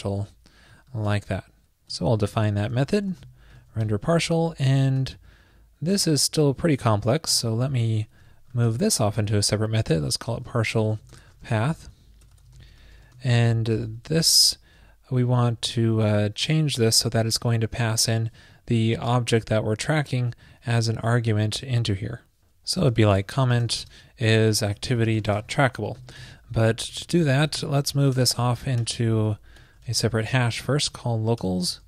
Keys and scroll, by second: 1.0 super+Left, 5.0 super+v, 6.0 super+Left, 6.3 alt+Right, 6.4 alt+Right, 7.5 shift+super+Right, 7.5 alt+shift+Left, 8.9 super+x, 14.3 super+v, 16.6 shift+super+Left, 17.0 shift+Right, 27.0 alt+shift+Left, 27.5 shift+Left, 29.2 alt+shift+Left.